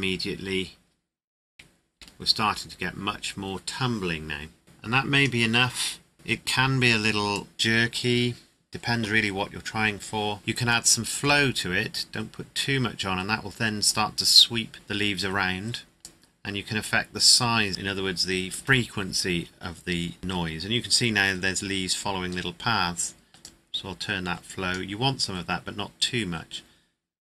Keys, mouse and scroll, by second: 1.9 KP_0, 4.6 click, 7.3 click, 10.7 click, 16.0 click, 23.4 click.